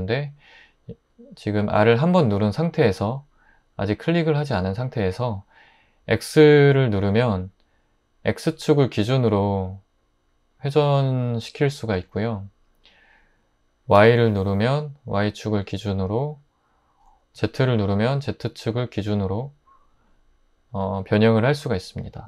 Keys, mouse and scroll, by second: 7.1 x, 13.9 y, 17.3 z.